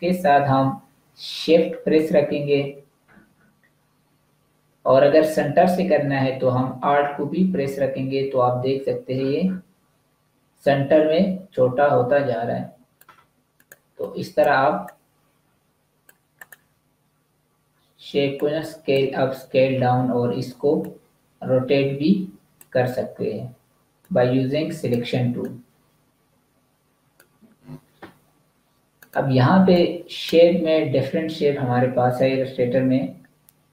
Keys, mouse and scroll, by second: 1.9 shift+click, 13.5 click, 25.3 click.